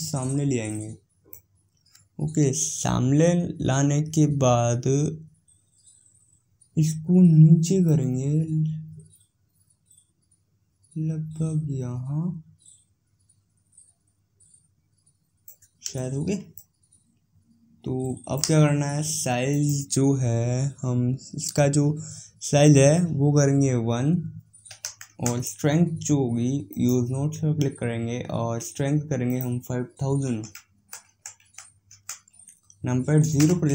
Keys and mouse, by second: 7.7-16.4 drag, 16.4-19.4 middle drag, 19.4-21.3 drag, 26.5-28.4 drag, 29.2-31.0 drag, 31.2 KP_0.